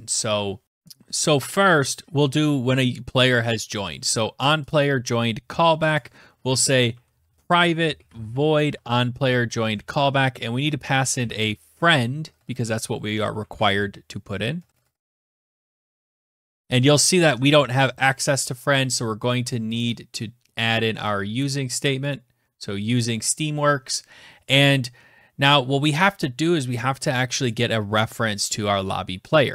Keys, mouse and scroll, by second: 0.4 click, 0.6 click, 0.6-1.2 scroll, 3.7 click, 3.8 click, 4.4 ctrl+c, 4.9 click, 5.3-17.1 typing, 7.6 ctrl+v, 18.2 right click, 18.7 click, 19.0 {, 20.0 click, 21.1 click, 21.9 click, 29.4-29.5 scroll down 5.